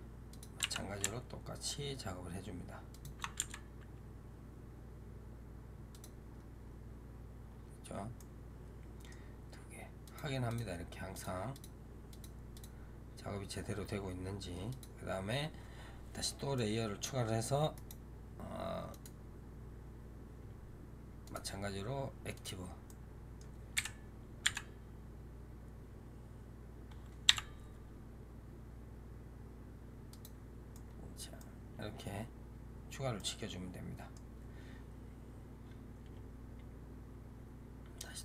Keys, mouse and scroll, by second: 0.5 r, 3.3 g, 6.1-7.3 scroll up 2, 7.3-8.0 scroll down 2, 8.0-9.9 middle drag, 9.9 click, 10.4 click, 11.0 click, 11.4 click, 12.0 click, 12.4 click, 14.6 click, 16.4-17.6 middle drag, 17.6-21.1 right drag, 21.1-22.8 drag, 22.8 middle click, 23.6 KP_7, 24.3 g, 30.6-36.1 middle drag.